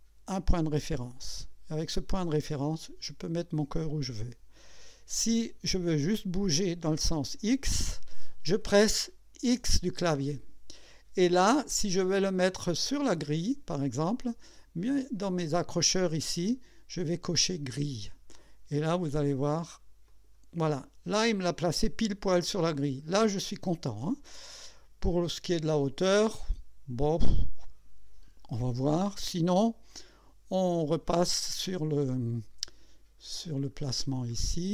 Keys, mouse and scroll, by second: 1.3 click, 9.5 x, 13.8 scroll up 2, 17.8 click, 20.1 click, 21.0 scroll up 1, 21.5 scroll down 1, 22.2 scroll down 1, 31.7 click, 32.9-33.8 scroll down 3, 34.3 right click.